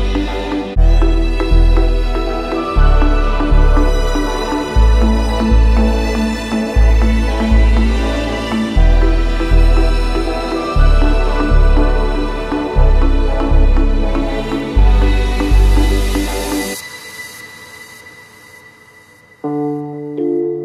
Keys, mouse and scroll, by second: 15.5 ctrl+c, 16.4 ctrl+f, 18.3 click.